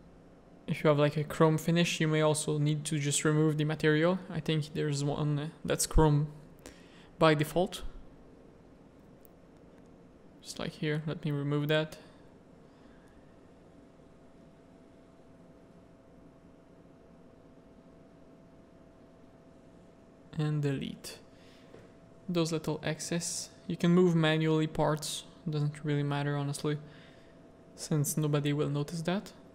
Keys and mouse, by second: 0.0 click, 2.0-3.4 drag, 4.0 r, 7.0 middle click, 7.6 Tab, 10.7 alt+a, 11.0 z, 12.3 middle click, 13.0 z, 13.1 middle click, 13.5 g, 15.7 Tab, 15.8 a, 16.1 s, 17.8 z, 18.5-19.5 drag, 20.1 x, 20.9 a, 21.2 z, 21.5 shift+middle click, 23.0 z, 24.1 click, 24.1 z, 25.9 click, 26.2 Tab, 26.6 Tab, 26.9 z, 27.1 a, 27.4 click, 28.0 z, 28.6 middle click.